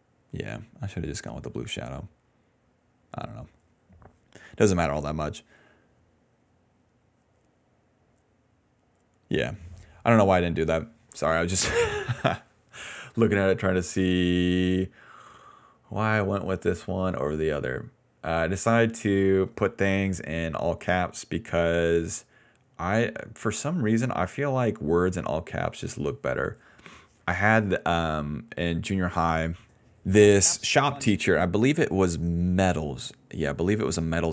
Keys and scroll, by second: 11.0-17.0 typing, 30.0 ctrl+s, 30.1 space, 30.6 d, 31.1 space, 32.5 p.